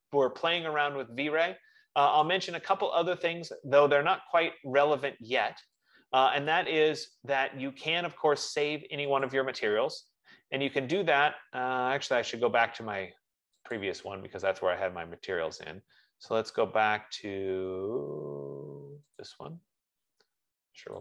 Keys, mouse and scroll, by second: 2.9 click, 7.2 click, 9.7 click, 14.0 click, 19.6 click.